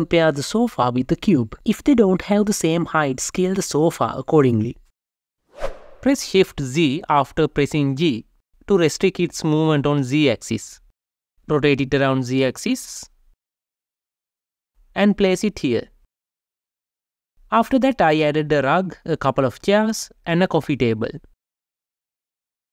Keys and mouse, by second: 0.4 g, 0.9 x, 6.9 g, 7.6 shift+z, 11.5 Escape, 11.5 r, 11.8 z, 14.6 g, 14.9 shift+z, 21.1 n.